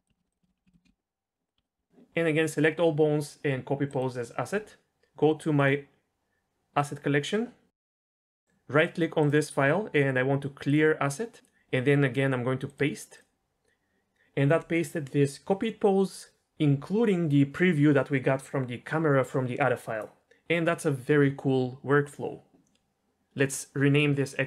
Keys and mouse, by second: 4.0 click, 8.1 click, 9.6-10.7 right drag, 12.6-13.2 drag.